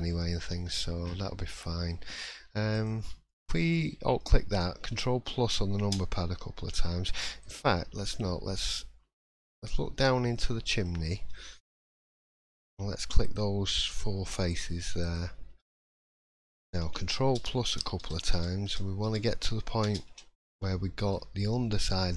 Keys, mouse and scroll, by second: 0.1 scroll up 4, 0.6 shift+middle click, 1.1-2.4 scroll up 4, 1.4 middle click, 2.7 alt+click, 3.3 middle click, 3.7-4.1 scroll down 3, 4.1 middle click, 5.4 ctrl+KP_Add, 5.8 ctrl+KP_Add, 7.4 click, 7.7 middle click, 8.4 scroll up 1, 8.5 middle click, 11.1 shift+middle click, 13.2 shift+click, 14.2 shift+click, 15.4 shift+click, 15.6 middle click, 16.3 scroll down 2, 17.3 ctrl+KP_Add, 18.6 ctrl+KP_Add, 19.5 ctrl+KP_Add, 20.1 ctrl+KP_Add, 20.6 scroll down 1, 20.6 middle click, 21.1-21.6 scroll up 2.